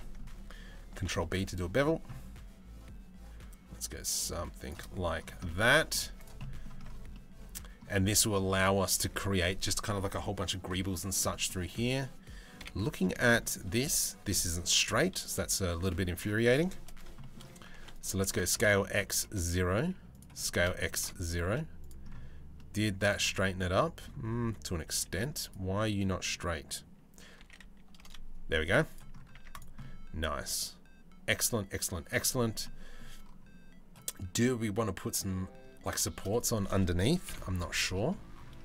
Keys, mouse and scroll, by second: 0.5 ctrl+b, 5.0 middle click, 5.7 Tab, 5.7 click, 6.0 middle click, 6.7-7.4 middle drag, 6.9 scroll down 1, 10.9 middle click, 12.2 KP_7, 12.8 shift+middle drag, 13.9 click, 14.3 Tab, 14.6 z, 14.8 click, 15.7 1, 15.9 click, 16.8 shift+middle click, 17.3 2, 18.0 s, 19.9 s, 21.0 z, 22.1 middle click, 23.1 middle click, 24.5 z, 27.0 s, 28.2 z, 29.0 Tab, 29.4-31.7 middle drag, 32.2-32.5 middle drag, 36.8 KP_Decimal, 37.5 middle drag.